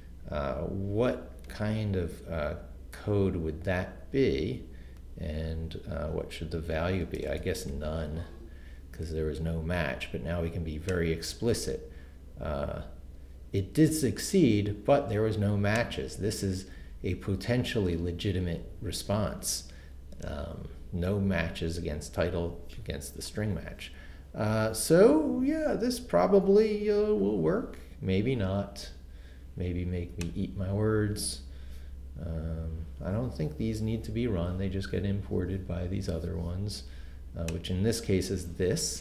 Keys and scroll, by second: 6.9-8.2 typing.